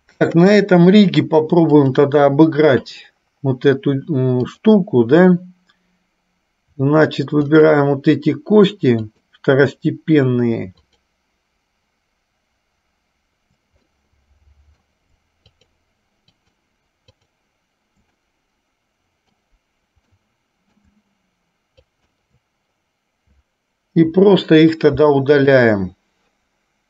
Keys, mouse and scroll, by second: 0.6 KP_1, 1.9-4.9 drag, 7.7-8.7 shift+drag, 9.3-10.3 shift+drag, 13.9-15.1 middle drag, 15.7 shift+click, 18.6-19.6 middle drag, 20.4 middle click, 22.1 shift+click.